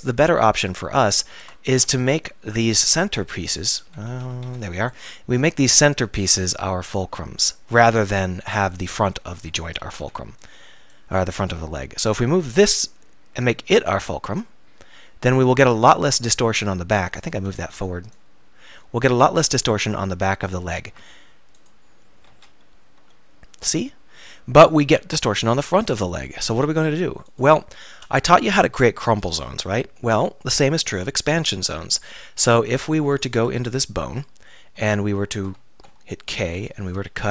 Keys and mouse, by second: 1.0 Tab, 1.5 Tab, 1.8-4.5 typing, 5.7-7.5 drag, 9.9 a, 10.0 a, 10.4-13.5 drag, 16.2 click, 17.4 a, 17.7 b, 20.9 Tab, 22.3 z, 23.0 r, 23.5-24.1 middle drag, 24.4 middle click, 26.2-27.4 middle drag, 27.4 click, 30.2-31.5 middle drag, 33.1-34.1 drag, 33.4 Tab, 34.2 click, 34.9 middle click, 35.0 middle click, 35.7 middle click, 36.5 k.